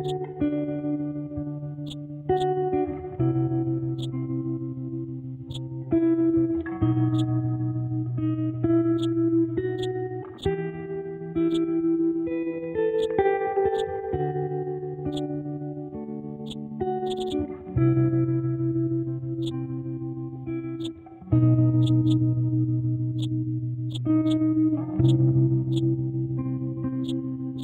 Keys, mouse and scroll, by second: 8.1 scroll up 1, 9.0-15.1 drag, 15.7-16.4 scroll down 1, 16.4 click, 19.4 click, 20.8 click, 23.2-27.6 drag.